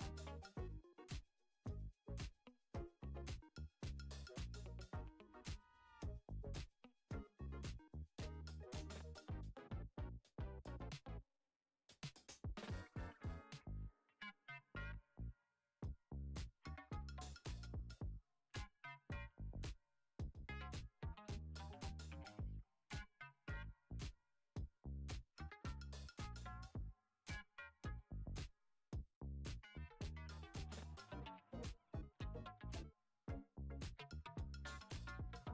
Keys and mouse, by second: 2.4 Tab, 3.1 s, 4.5 Tab, 5.3 click, 6.7 g, 8.3 middle click, 9.0 i, 11.7 e, 14.0 Tab, 14.4 right click, 15.7 click, 18.3 click, 18.7 click, 21.3-23.3 drag, 23.9-24.3 shift+middle drag, 24.5-25.0 middle drag, 25.6 KP_1, 26.3 Tab, 27.2-28.2 shift+middle drag, 28.5 ctrl+r, 31.3 shift+d, 32.5 p, 33.4 Tab, 34.7 click, 35.2 Tab.